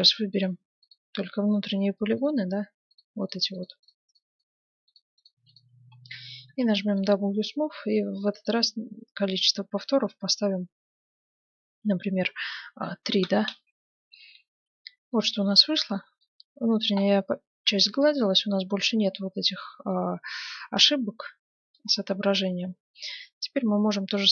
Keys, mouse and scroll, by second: 0.0 ctrl+Tab, 0.9-2.6 right drag, 2.2-4.0 drag, 3.0-7.2 right drag, 5.9-7.8 middle drag, 6.5 w, 8.3-10.1 drag, 14.5 Tab, 15.1-19.7 middle drag, 20.9-22.5 middle drag, 22.9-24.3 middle drag.